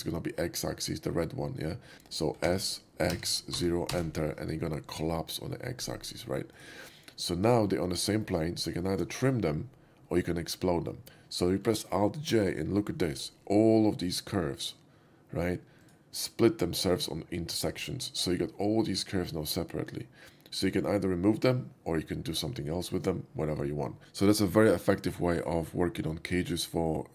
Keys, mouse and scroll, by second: 0.0-0.4 middle drag, 1.9 Return, 2.4 s, 3.1 x, 3.6 0, 3.7 x, 3.9 Return, 6.6 right click, 7.1-7.6 middle drag, 7.8 alt+middle click, 8.2 alt+middle click, 8.5 alt+middle click, 8.8 shift+middle drag, 12.5 alt+j, 15.7 click.